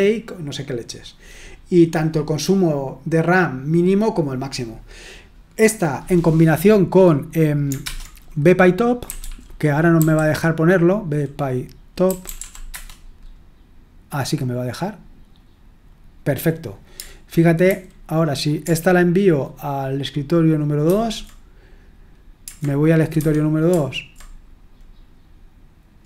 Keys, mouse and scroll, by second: 7.8 super+Return, 9.0-9.9 typing, 11.8-12.8 typing, 17.6 super+h, 20.9 super+", 23.2 super+2.